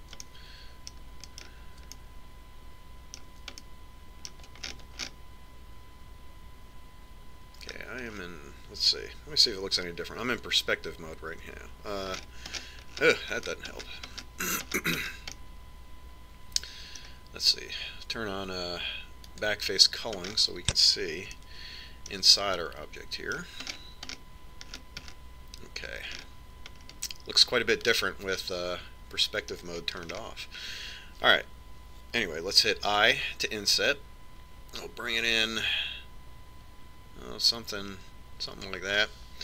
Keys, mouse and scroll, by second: 0.4-8.2 middle drag, 8.9-11.4 middle drag, 12.7 KP_5, 13.4-15.8 middle drag, 16.3-18.4 middle drag, 20.6 click, 22.3-29.4 middle drag, 29.9-31.2 middle drag, 31.5-33.4 scroll up 1.